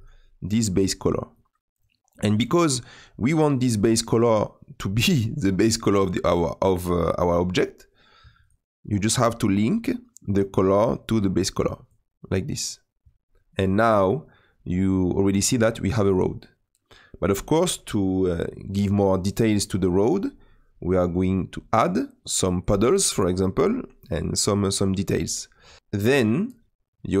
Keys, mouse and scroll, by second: 1.3-6.4 drag, 11.9 click, 20.9-27.2 drag.